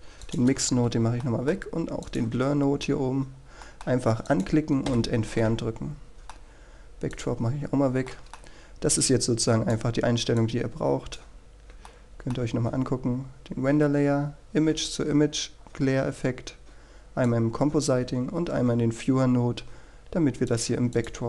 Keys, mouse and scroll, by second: 1.4 click, 1.8 Delete, 2.4 middle click, 3.2 click, 4.0 Delete, 4.8 middle click, 5.4 click, 6.0 Delete, 6.6-7.6 middle drag, 8.2 click, 8.7-9.1 scroll down 1, 9.2 middle click, 10.2 click, 11.4 middle click, 12.4-13.0 scroll up 1, 13.0-14.1 middle drag, 18.4 click.